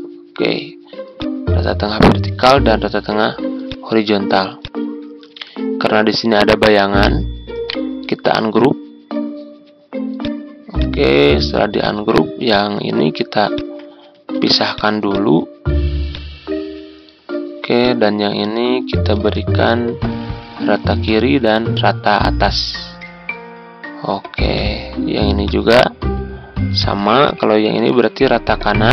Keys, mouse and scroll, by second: 2.8-3.6 ctrl+scroll up 1, 3.6 click, 5.1 ctrl+scroll down 1, 7.6 right click, 10.1 click, 13.5 shift+click, 14.3 ctrl+z, 14.7-17.5 drag, 19.1 ctrl+g, 20.9-28.5 drag.